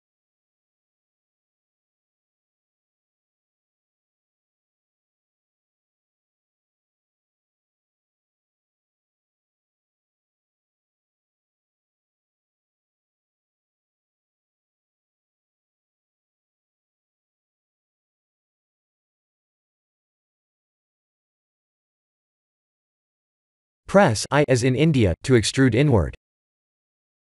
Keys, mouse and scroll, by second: 0.6-0.9 scroll up 3, 0.9 Tab, 2.6 middle click, 3.0 3, 3.5 click, 5.0 KP_1, 6.1 g, 13.2 shift+z, 14.5 right click, 15.8 shift+z, 16.4 click, 17.1 Tab, 17.6 click, 17.9 right click, 18.6 Tab, 19.1 shift+z, 19.7 middle click, 21.4 middle click, 22.9 3, 23.2 click, 24.8 i.